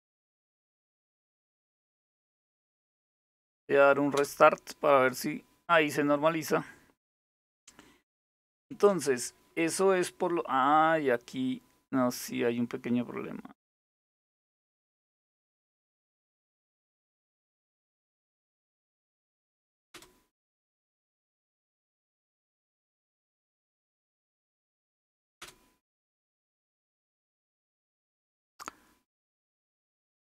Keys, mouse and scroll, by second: 1.2 super+x, 2.8 Down, 3.8 Return, 8.1 super+Return, 13.9 click, 16.6-17.9 typing, 19.6 Return, 22.1 super+x, 25.0 Return.